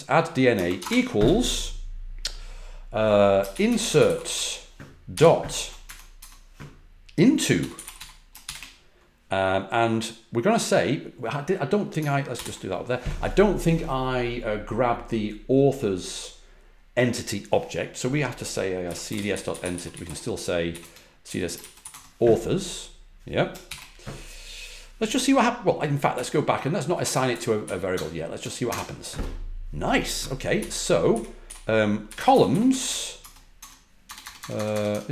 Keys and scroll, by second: 0.5 typing, 3.2-5.1 typing, 5.8 Tab, 6.1 Tab, 7.2-8.9 typing, 12.3 ctrl+l, 18.5-21.7 typing, 21.8 Tab, 23.6 shift+0, 26.1 Left, 26.3 Left, 26.4 Left, 27.0 Right, 27.2 Right, 27.6 Left, 27.9 BackSpace, 28.1 BackSpace, 28.2 BackSpace, 28.6 Return, 30.5 Down, 31.0 Up, 31.4-34.8 typing.